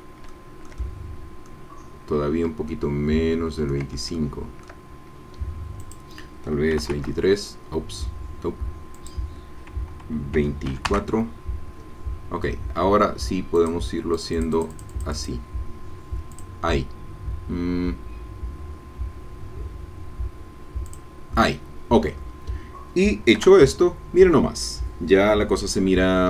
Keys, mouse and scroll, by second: 0.3-2.0 shift+middle drag, 2.7-3.9 ctrl+drag, 3.9 ctrl+middle click, 4.1 ctrl+shift+middle click, 4.2 ctrl+shift+click, 5.8 click, 6.7 KP_2, 6.8 KP_3, 6.9 KP_Enter, 9.0 click, 10.4 KP_2, 10.7 KP_4, 10.9 KP_Enter, 13.6 click, 14.2-15.4 drag, 16.3 click, 20.9 click, 22.0-22.5 scroll down 1, 22.5-24.2 drag, 23.4 KP_0, 26.0-26.2 scroll down 2.